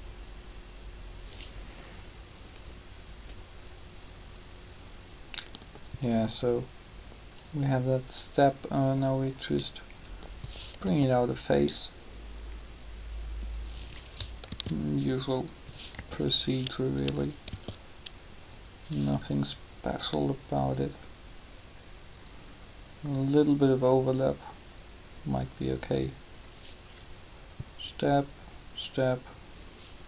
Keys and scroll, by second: 10.8 g, 14.5 shift+d, 15.9 g, 17.5 shift+d, 19.7 g.